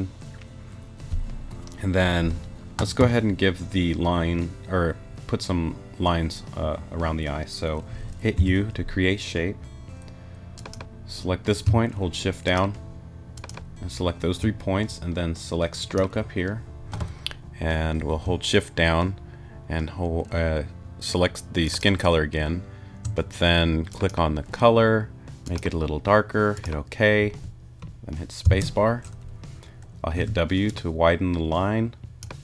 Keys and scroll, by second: 8.4 u, 28.4 space, 30.1 w.